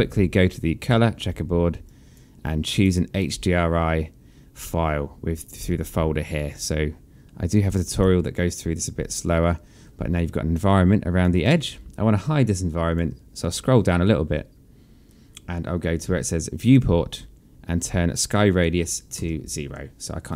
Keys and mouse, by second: 0.6 click, 1.7 click, 5.5 click, 7.3 click, 8.9 click, 10.3 alt+click, 12.2 alt+click, 16.4 click, 18.1 click, 19.0 KP_0, 19.4 Return, 19.4 KP_Enter, 20.1 click.